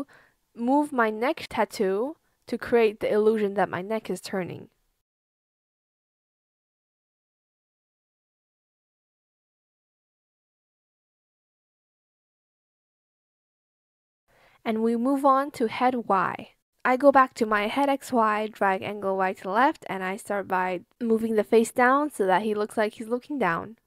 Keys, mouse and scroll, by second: 3.3 shift+click, 6.4 shift+click, 7.4 shift+click, 7.8 alt+click, 8.6 shift+click, 12.5 click, 12.5 b, 12.8 shift+click, 13.4 shift+click, 14.6 Escape, 16.2 ctrl+z, 18.4 shift+click, 22.6 shift+click.